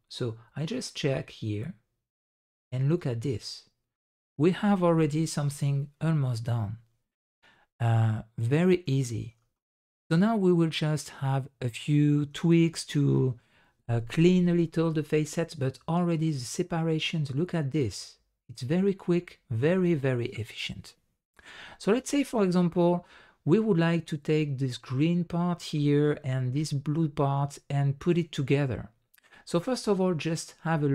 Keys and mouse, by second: 0.9-2.6 middle drag, 3.3-3.9 middle drag, 4.3 middle click, 4.9-8.9 middle drag, 10.0-11.8 middle drag, 14.9-19.9 middle drag, 21.6 middle click, 22.3-24.2 middle drag, 25.8 middle drag, 27.5-29.2 middle drag, 29.7-30.3 middle drag.